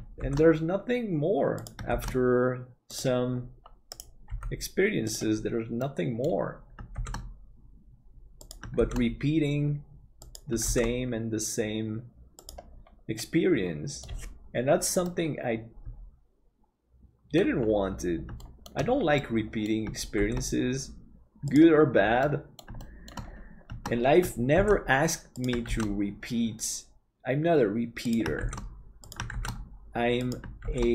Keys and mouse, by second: 0.3 shift+d, 4.3 g, 5.8 middle click, 7.0 shift+d, 13.2-14.2 middle drag, 15.2-17.5 middle drag, 18.4 shift+middle click, 19.3 middle click, 20.2 shift+d, 22.4 middle click, 22.9 middle click, 24.6 shift+d.